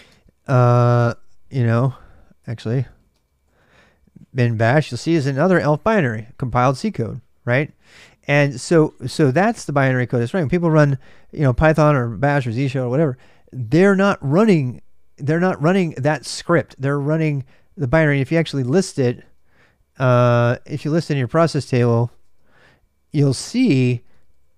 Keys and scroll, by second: 0.0-7.7 typing, 18.8-24.5 typing.